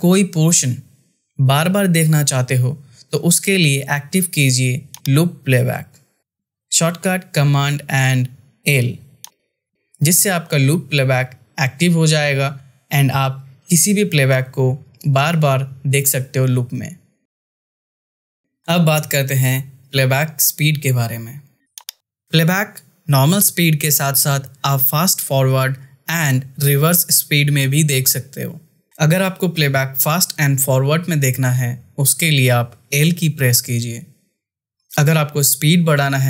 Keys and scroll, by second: 12.9 space, 33.0 l.